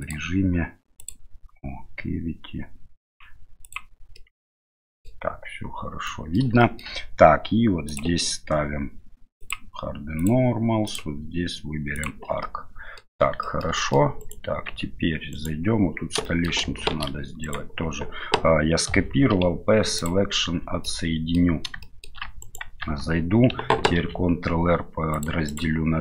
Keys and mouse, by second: 0.0-4.0 drag, 4.2-5.0 middle drag, 6.0 middle click, 6.6 shift+middle drag, 7.8 click, 9.4 click, 10.9-12.1 drag, 12.4-13.0 middle drag, 13.4 shift+middle drag, 13.8 middle click, 14.2 right click, 14.6 Tab, 15.3 right click, 16.2 shift+middle click, 16.9 shift+d, 19.3 p, 20.4 Tab, 20.8 middle click, 21.8 shift+middle click, 22.4 right click, 22.8 Tab, 24.0 ctrl+r.